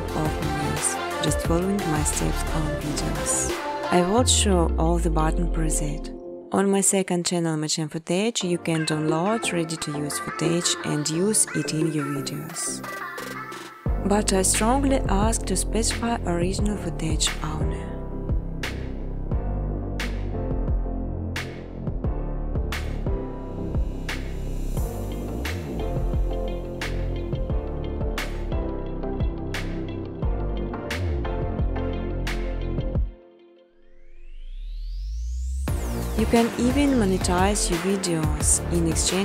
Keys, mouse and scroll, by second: 0.6 click, 1.1 0, 1.4 click, 3.9 space, 5.4 space, 6.1 space, 7.2 space, 7.7 space, 9.3 space, 10.2 scroll, 11.2 click, 12.8 scroll, 14.3 click, 14.8 n, 15.7 click, 16.0 space, 17.9 space, 19.2 click, 19.3 space, 21.0 space, 21.7 click, 22.6 ctrl+c, 23.3 ctrl+d, 23.8 ctrl+d, 24.7 click, 25.0 right click, 26.7 click, 28.1 click, 29.4-30.6 typing, 31.6 click, 32.6 click, 32.8 click, 34.0 click, 35.3 click, 36.8 click, 38.0 click, 38.3-39.2 typing.